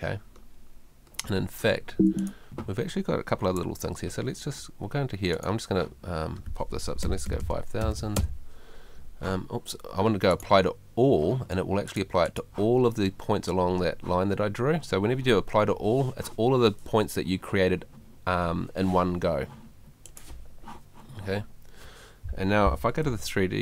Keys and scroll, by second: 1.9 Escape, 3.3 F2, 7.0 5, 23.0 F3.